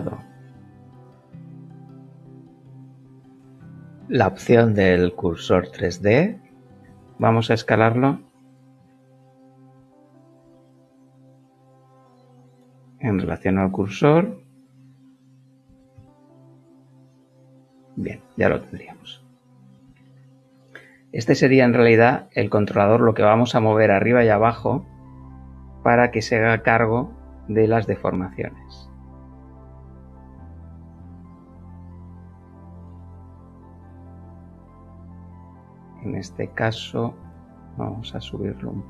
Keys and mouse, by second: 0.1 click, 0.7 click, 2.1 click, 3.1 click, 6.5 s, 6.8 z, 8.7 Escape, 9.7 s, 10.4 y, 14.7 click, 15.6 s, 15.9 x, 17.9 click, 18.8 Tab, 19.9 shift+middle click, 28.3 Tab, 28.9 middle click, 33.1 shift+middle click, 34.2 shift+middle click, 34.8 shift+middle click, 35.5 shift+middle click, 36.9 KP_1, 38.7 g.